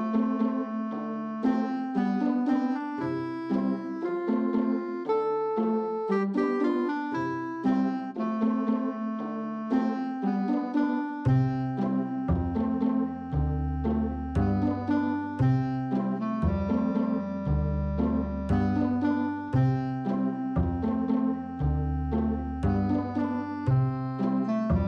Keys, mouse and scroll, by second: 2.4 click, 9.0-10.0 middle drag, 10.2-10.9 middle drag, 11.1 shift+middle click, 11.4 middle click, 11.9 shift+middle click, 12.2-12.6 middle drag, 13.1 middle click, 13.7 middle click, 17.0 middle click, 17.4 Tab, 21.3 click, 21.7 click, 22.0 click, 22.8 middle click, 23.5 middle click, 24.3 middle click, 24.7 shift+middle click.